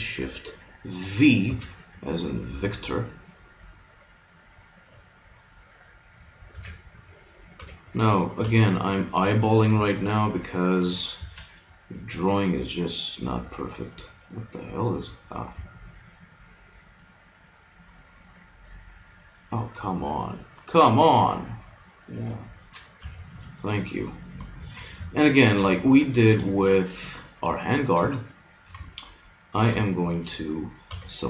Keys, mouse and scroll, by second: 1.5 shift+v, 6.5 a, 7.7 b, 8.5 b, 11.2 shift+v, 22.5 click, 23.1 a, 24.6 ctrl+Tab, 26.6 middle click, 30.9 b.